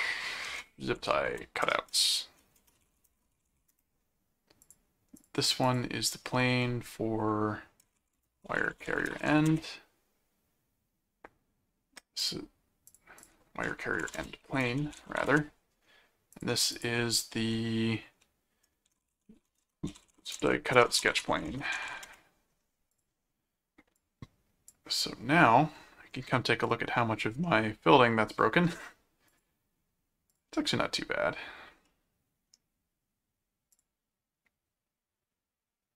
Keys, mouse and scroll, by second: 0.7-4.1 typing, 4.6-6.2 drag, 7.6-9.9 typing, 12.2 click, 12.9 click, 14.1-15.7 typing, 16.3 click, 18.6-22.4 typing, 22.9 click, 23.9 click, 26.3 middle click, 27.4 middle click, 29.3 click, 30.3 click, 31.9 middle click, 33.7 click.